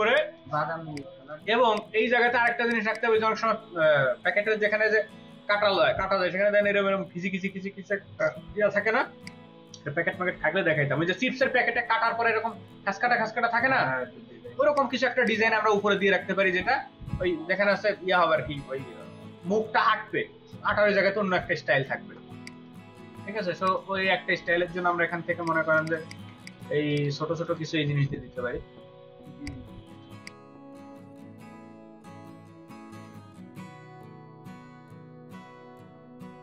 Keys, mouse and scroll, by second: 0.4 space, 2.6 ctrl+alt+click, 2.8 ctrl+alt+double click, 14.4 space, 15.0 space, 22.2 space, 25.8 ctrl+space, 26.0 ctrl+double click, 28.2 v, 30.4 double click, 30.5 ctrl+alt+click, 30.6 space, 31.2 ctrl+d, 31.6 double click, 32.2 space, 32.3 ctrl+alt+click, 32.4 space, 32.9 double click, 33.3 Delete.